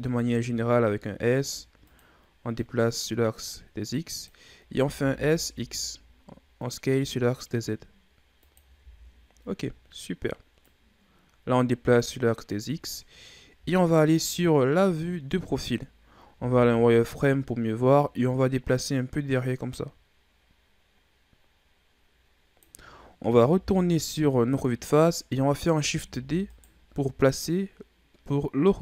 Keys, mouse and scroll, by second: 2.5-4.7 drag, 4.7 s, 8.8 z, 9.8-10.6 scroll up 2, 10.6-13.5 drag, 13.5 KP_3, 14.6 scroll down 4, 15.0-16.3 ctrl+scroll up 8, 16.3 z, 18.0-21.0 drag, 23.5 KP_1, 26.0 shift+d, 27.4-28.8 drag.